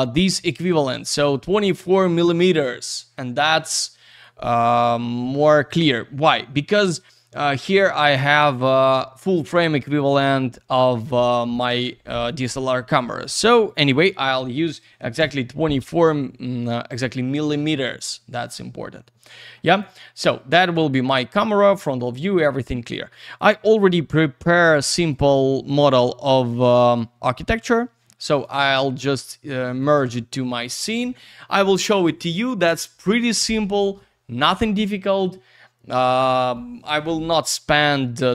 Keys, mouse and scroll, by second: 4.3 click, 7.3 click, 13.2 click, 13.7 click, 13.7 double click, 13.8 click, 14.8 typing, 15.2 Return, 17.7 middle click, 18.0 alt+w, 18.5 alt+z, 19.3 middle click, 19.7 alt+click, 19.9 alt+middle click, 23.3 click, 25.1 click, 25.7 click, 26.7 click, 26.8 click, 27.8 click, 29.8 click.